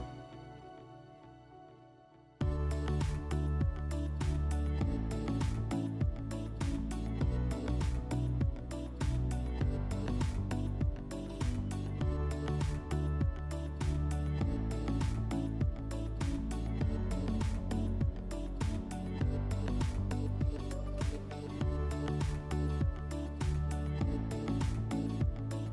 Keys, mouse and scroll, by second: 3.7 click, 4.8 click, 6.9 click, 10.4 click, 12.9 alt+w, 14.6 click, 15.6 click, 17.2 click, 17.9 click, 18.4 click, 18.9 w, 21.1 click, 22.4 click, 23.4 alt+w, 24.6 click.